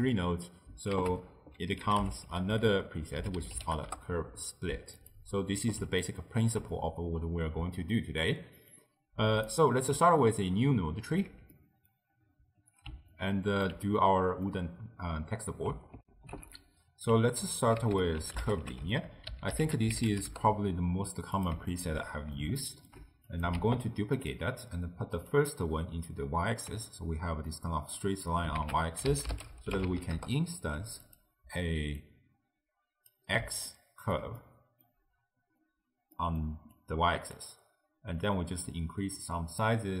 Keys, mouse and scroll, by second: 1.0 ctrl+a, 6.1-8.8 ctrl+middle drag, 8.8 click, 11.2 ctrl+x, 11.6-16.0 middle drag, 16.0 ctrl+alt+shift+w, 17.9 ctrl+a, 21.8 alt+shift+click, 22.1-23.4 middle drag, 23.4 click, 23.6 shift+d, 25.2-26.9 drag, 26.9-28.6 middle drag, 28.6 ctrl+a, 32.0 click, 33.7-36.8 ctrl+middle drag, 36.8 click, 38.2-40.0 drag.